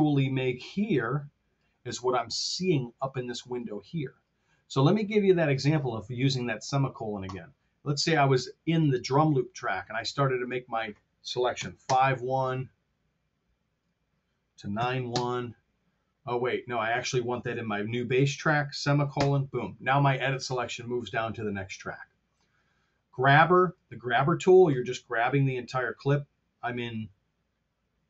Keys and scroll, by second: 11.5 KP_5, 11.7 Home, 14.7 KP_9, 15.0 Return, 19.0 ;.